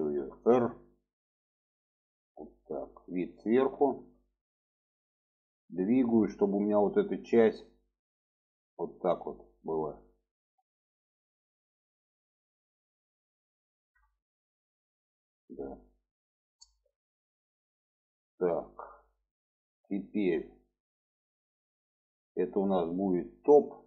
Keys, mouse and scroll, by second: 0.1 r, 2.6-3.5 middle drag, 3.8 shift+middle drag, 5.3-9.6 drag, 12.1 shift+middle click, 12.9-13.4 shift+middle drag, 14.0-14.3 shift+middle drag, 15.8-16.1 shift+middle drag, 16.9-17.3 shift+middle drag, 19.8-21.1 middle drag, 21.4-22.7 middle drag, 23.8 click.